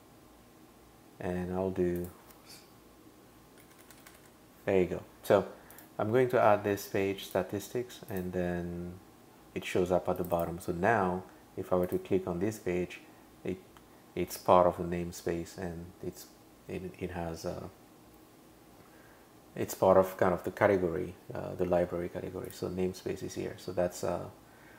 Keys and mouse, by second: 2.0 click, 3.4-4.7 typing, 5.7 click, 7.2 click, 8.1 click, 10.2 click, 10.3 click, 11.9 click, 22.5 click, 23.5 super+[.